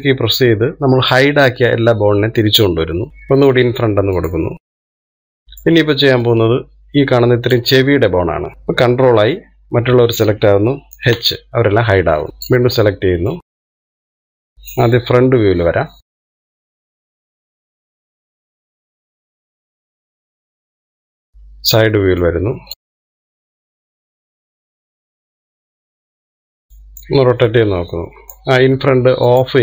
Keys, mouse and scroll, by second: 3.1 alt+h, 5.2 click, 6.0-7.6 shift+middle drag, 7.6 click, 10.6 ctrl+i, 12.3 h, 12.4 middle click, 13.3 click, 13.7 middle click, 14.1 click, 14.5 middle click, 14.9-15.3 scroll up 2, 15.3 shift+middle click, 16.1 KP_1, 16.4 scroll up 2, 16.5 shift+middle click, 17.4 click, 17.6 click, 17.8 click, 18.4 click, 18.6 click, 22.3 KP_3, 23.0 click, 23.3-25.1 click, 25.1 click, 25.6 click, 26.8-28.0 scroll down 1, 28.0-29.6 middle drag.